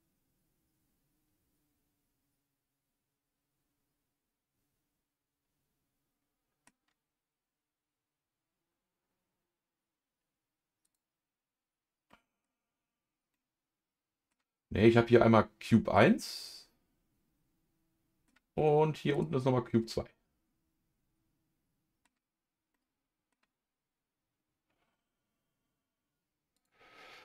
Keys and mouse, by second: 10.8 click, 12.1 middle click, 13.3-14.3 middle drag, 15.9-18.3 middle drag, 19.1 click, 19.8-22.0 middle drag, 22.7 middle click, 26.5-27.2 drag.